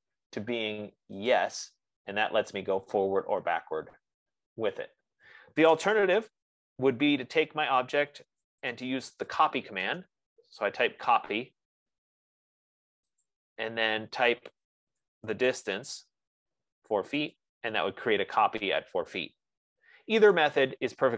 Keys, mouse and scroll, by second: 1.7 click, 4.8 F15, 6.5 Escape, 6.7 click, 9.4-10.4 typing, 13.4-15.8 typing, 13.7 click, 17.6 click, 18.8 Escape, 20.8 click.